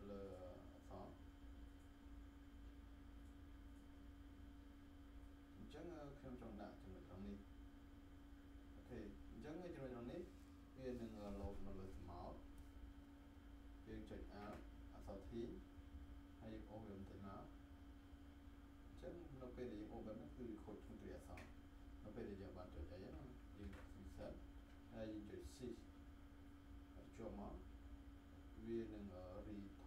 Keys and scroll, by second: 14.2 ctrl+t, 23.6 ctrl+z.